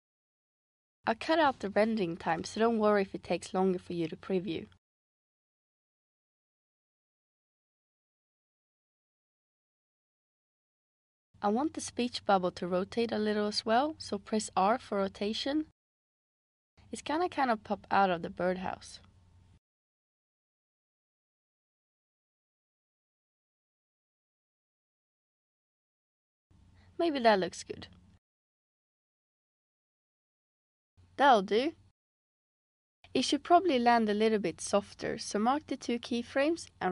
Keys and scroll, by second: 14.6 r, 28.5 space, 31.3 space.